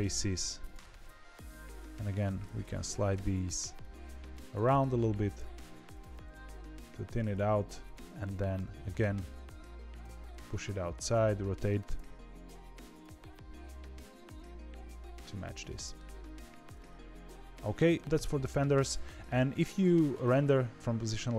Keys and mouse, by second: 1.0 z, 2.4 g, 4.3 click, 4.5 g, 5.8 click, 7.5 2, 7.8 alt+click, 8.5 KP_1, 9.9 r, 11.9 g, 13.1 r, 14.2 g, 15.6 middle click, 16.3 z, 16.7-19.2 middle drag, 19.6 shift+middle click.